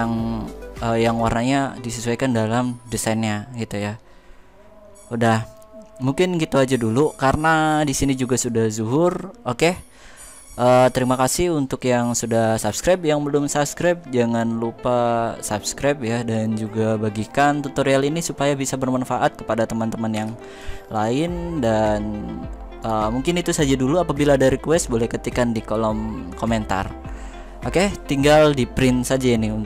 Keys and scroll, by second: 19.9 z.